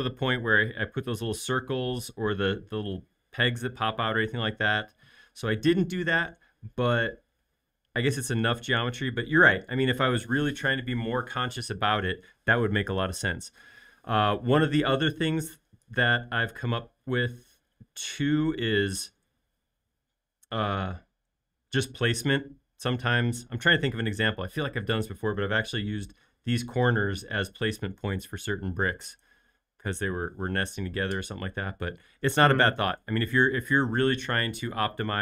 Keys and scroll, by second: 17.3 space, 25.6 l, 31.2 space.